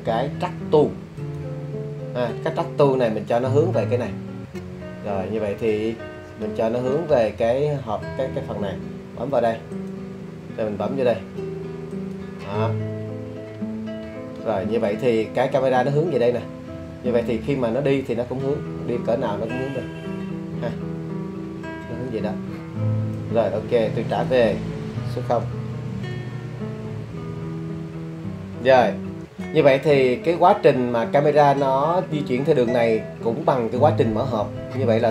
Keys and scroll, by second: 25.5 0, 26.0 Return.